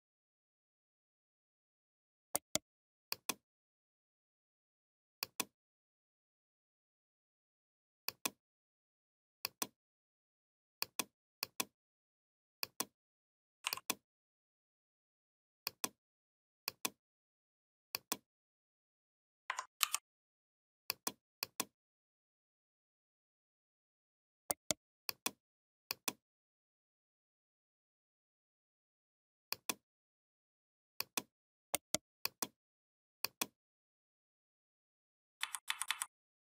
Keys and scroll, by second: 19.6 ctrl+g, 35.2 v.